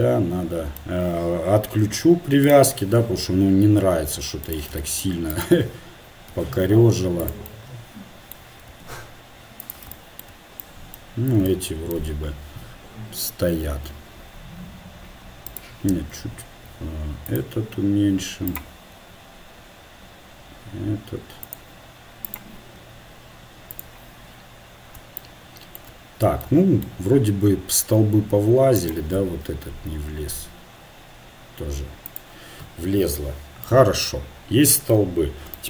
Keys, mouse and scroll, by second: 3.2-4.4 drag, 3.2 r, 5.3-7.0 right drag, 6.3 r, 9.2 r, 12.1-16.1 drag, 17.3 s, 19.3 s, 23.0 s, 28.8-29.8 drag, 29.8 s, 34.0 middle click, 35.3-35.6 middle drag.